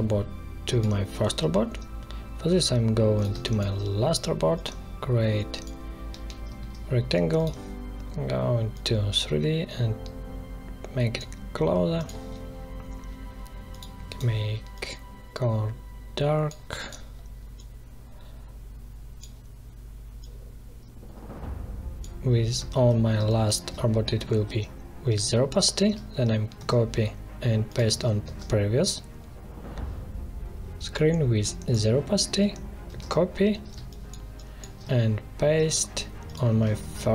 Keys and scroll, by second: 3.2 space, 6.0 v, 23.1 space, 26.5 ctrl+c, 28.2 ctrl+v, 32.8 ctrl+c, 33.7 space, 36.7 ctrl+v.